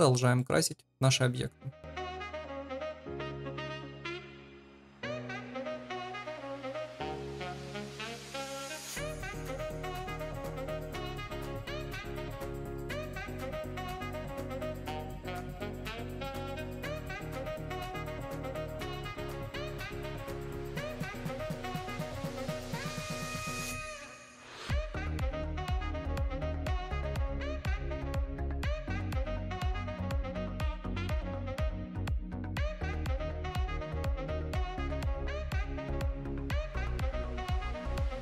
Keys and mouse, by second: 0.3 shift+middle drag, 3.3 shift+click, 3.7 shift+click, 4.1 ctrl+l, 9.8 click, 10.4 drag, 10.8 ctrl+v, 11.2 click, 13.2 click, 13.6 click, 14.6 shift+middle drag, 16.0 shift+click, 16.4 shift+click, 17.6 shift+middle click, 17.8 click, 18.6 drag, 19.0 shift+click, 19.5 shift+click, 19.7 shift+click, 20.1 shift+middle click, 20.9 shift+click, 21.3 ctrl+l, 21.9 shift+middle click, 22.7 ctrl+s, 23.5 middle drag, 24.4 KP_1, 24.7 shift+middle click, 24.9 g, 25.4 middle click, 32.1 middle drag, 32.5 shift+middle click, 33.1 click, 33.9 click, 34.4 click, 35.1 click, 35.9-37.1 drag, 37.5 click, 37.8 middle click, 38.1 shift+click.